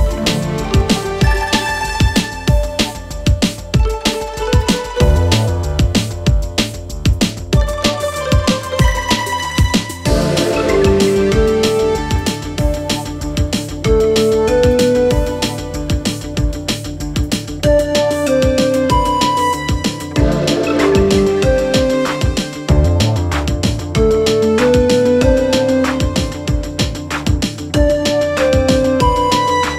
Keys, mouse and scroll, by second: 13.3 click, 16.5-21.0 drag, 21.0-22.4 drag, 25.0-27.7 drag.